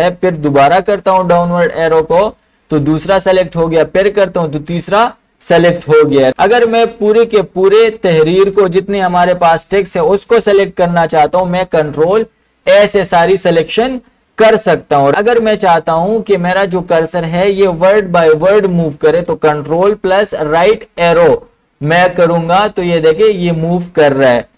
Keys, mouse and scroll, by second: 0.7 ctrl+shift+Down, 3.9 ctrl+shift+Down, 5.8 Up, 11.0 Up, 12.5 ctrl+a, 20.6 ctrl+Right.